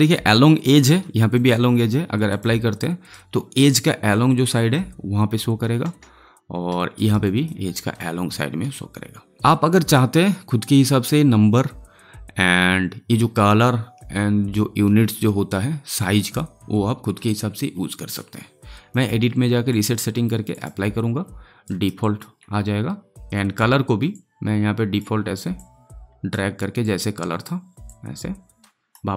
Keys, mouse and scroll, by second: 2.7-5.8 alt+right drag, 5.8 space, 6.9 alt+right click, 7.2 alt+click, 21.6 alt+right click, 21.9 alt+click, 23.1-29.1 drag.